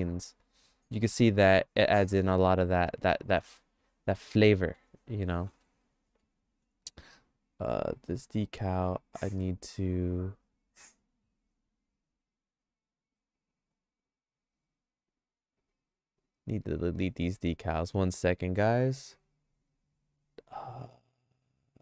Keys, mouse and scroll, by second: 0.9 click, 1.9 middle click, 2.1-4.9 shift+middle drag, 5.3 middle click, 5.7 shift+middle click, 7.8 click, 8.9 click, 9.4 click, 14.0 click, 15.1 click, 15.6 click, 20.3 click, 20.8 click, 21.2 click, 21.6 click.